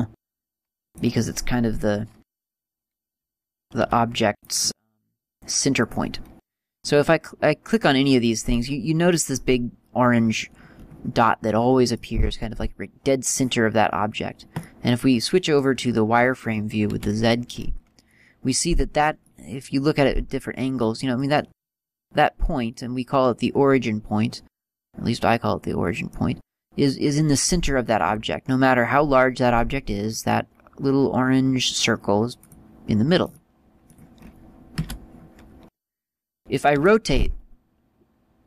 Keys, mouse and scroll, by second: 1.1 click, 1.4 scroll down 1, 2.0-2.6 scroll down 2, 2.6 right click, 4.0 g, 4.7 click, 5.0 middle click, 6.9 right click, 10.6-11.3 scroll up 6, 12.1 right click, 13.4 right click, 14.0 scroll down 1, 14.8 middle click, 14.8 scroll down 1, 19.4 middle click, 21.6-22.0 scroll down 4, 22.0 middle click, 32.7 click, 33.5 middle click, 35.0 z.